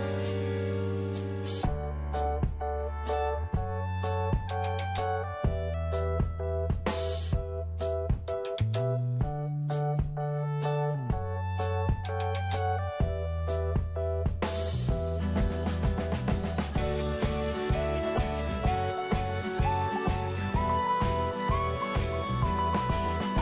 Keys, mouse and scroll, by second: 2.8 click, 4.9-5.9 scroll up 1, 5.9-7.1 scroll down 1, 12.3 middle click, 12.9 scroll up 1, 13.6-23.4 drag.